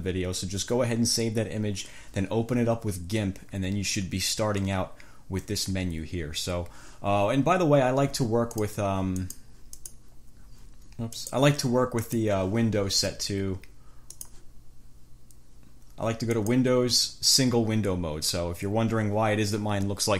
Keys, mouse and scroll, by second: 8.7 click, 9.5 click, 10.0 click, 11.3 click, 12.3 click, 14.4 click, 16.5 click.